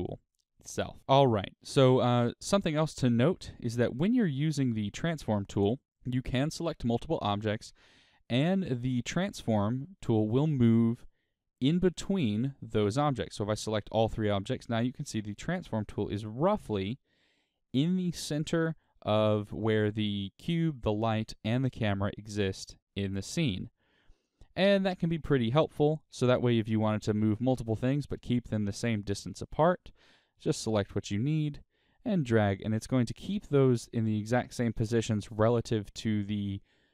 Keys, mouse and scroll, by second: 1.1-2.0 scroll down 2, 7.2 click, 8.3 click, 9.2 shift+click, 9.9-12.8 middle drag, 12.8 shift+click, 13.4-31.2 middle drag, 31.2-32.8 drag, 32.8-36.9 middle drag.